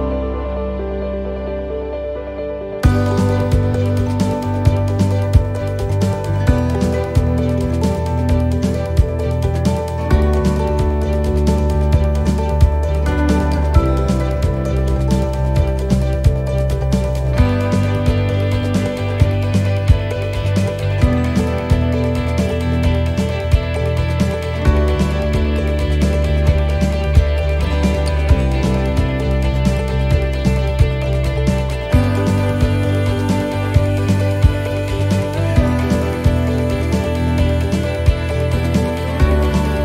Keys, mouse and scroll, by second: 3.1 right click, 4.0 alt+shift+right click, 5.4 s, 7.3 shift+middle click, 8.4-9.0 scroll up 1, 9.0 a, 11.3 click, 16.6 scroll up 1, 16.7 click, 18.0 scroll down 2, 19.6 click, 22.7 scroll up 2, 23.5 shift+middle click, 28.9 middle click, 31.8 shift+middle click, 32.3-33.3 scroll up 1, 33.3 right click, 34.1 shift+right click, 36.5 shift+middle click, 38.6 shift+d.